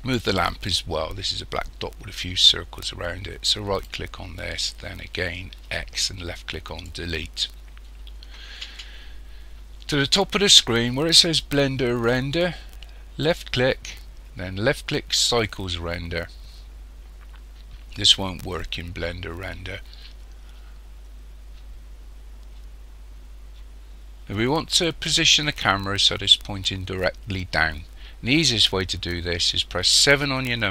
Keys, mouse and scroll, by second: 3.8 right click, 5.7 x, 13.2 click, 30.1 KP_7.